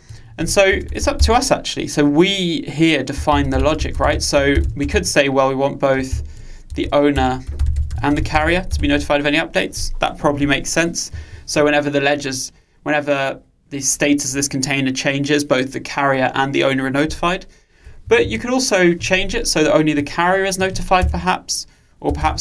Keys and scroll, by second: 6.2 alt+Return.